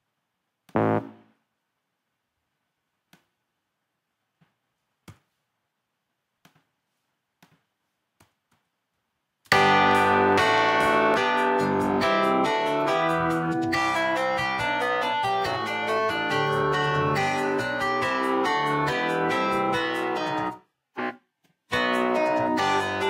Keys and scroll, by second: 5.1 q, 8.2 e, 20.5 space, 21.7 space.